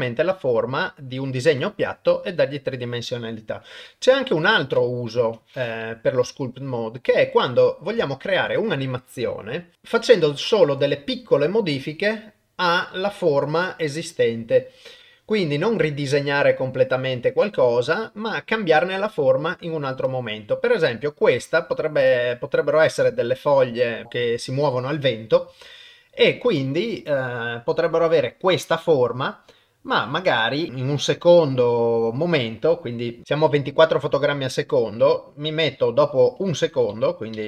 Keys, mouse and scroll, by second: 3.6 KP_1, 5.2 KP_0, 6.3-7.9 ctrl+middle drag, 8.0 shift+middle click, 22.2-24.9 middle drag, 25.5 KP_0, 31.0-33.2 drag, 35.7-36.5 drag, 36.5 Left, 36.7 Left, 36.9 Left, 37.3 Left.